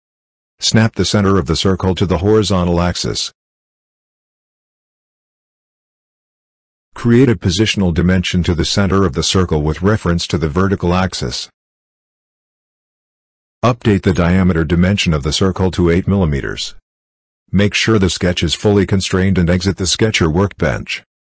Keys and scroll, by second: 16.0 8, 16.3 Return.